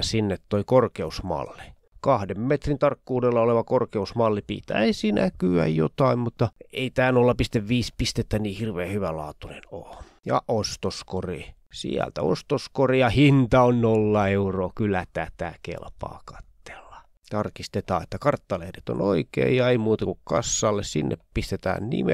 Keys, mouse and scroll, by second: 0.3 click, 2.3 click, 3.2 click, 4.5 shift+click, 5.8-6.4 scroll down 2, 7.0 scroll down 2, 7.8 scroll down 2, 10.1 click, 11.4 click, 12.2 click, 13.3 click, 14.0 click, 14.8 click, 15.3 click, 17.0 click, 18.8 click, 20.6 click, 21.7 click.